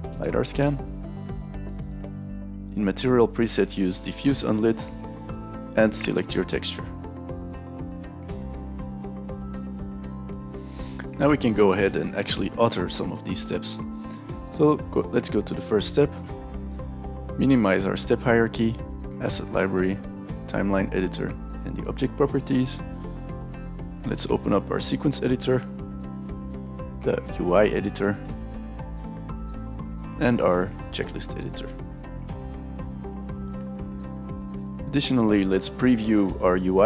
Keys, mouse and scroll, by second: 0.0-0.5 typing, 2.6 click, 3.9 click, 6.7 click, 7.4 click, 8.5 alt+right click, 8.9 alt+click, 9.3 alt+middle click, 9.4 alt+click, 15.6 click, 17.5 click, 18.8 click, 20.3 click, 21.6 click, 23.6 click, 24.6 click, 25.6 click, 26.2 click, 28.2 click, 28.7 drag, 29.1 click, 29.2 click, 31.1 click, 32.4 click, 32.8 click, 33.7 click, 34.2 click.